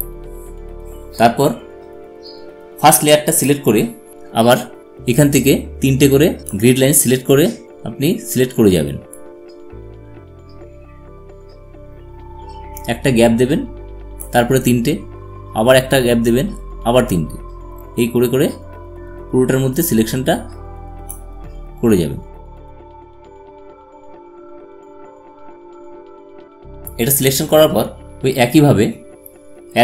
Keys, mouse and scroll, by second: 4.1-8.4 drag, 10.1-23.6 drag, 23.7-24.9 drag, 24.9-26.3 drag, 26.3-28.8 drag.